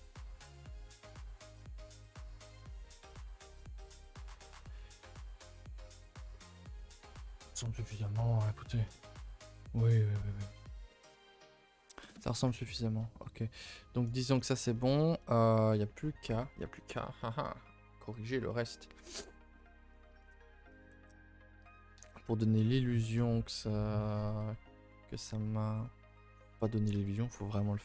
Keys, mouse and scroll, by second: 0.6 r, 2.5-4.9 typing, 4.5 Tab, 5.3-6.1 scroll down 5, 6.1-6.5 shift+middle drag, 6.5 a, 6.7 a, 7.5 shift+middle click, 8.2 a, 9.2-9.8 shift+middle drag, 9.8 scroll down 1, 9.9 middle drag, 10.2-10.8 scroll up 8, 10.8-11.7 middle drag, 11.7-12.1 middle drag, 12.1 a, 12.2 a, 12.4-14.7 middle drag, 14.7 scroll down 1, 14.8-22.0 middle drag, 22.0 KP_0, 22.9 middle click, 23.1-25.2 scroll up 1, 25.2 Left, 26.9 Tab, 27.3 middle click, 27.7 scroll up 1.